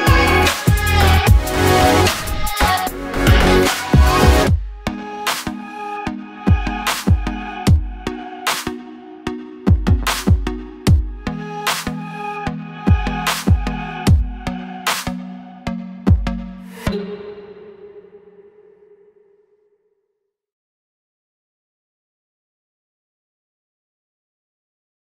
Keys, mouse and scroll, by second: 0.0 g, 1.3 KP_7, 1.7-2.3 scroll up 2, 1.9-3.9 middle drag, 2.4 scroll down 1, 2.6-4.9 typing, 4.1-4.5 scroll up 2, 4.7 scroll down 2, 5.4-6.4 scroll down 2, 6.4-6.9 scroll down 1, 6.9 Tab, 7.1 click, 7.2 scroll up 2, 7.4 shift+middle click, 8.0 alt+click, 8.4 s, 9.8 g, 11.7 KP_7, 12.0 ctrl+z, 12.9 Tab, 13.4 g, 14.8 r, 16.2 click, 16.8-18.7 typing, 17.0 click, 19.2 scroll down 1, 19.2-20.9 middle drag, 19.6 scroll up 1, 20.7 g, 20.9 click, 21.0 ctrl+z, 21.2 g, 21.5 click, 21.9 Tab, 22.5 s, 23.4 click, 23.6 s.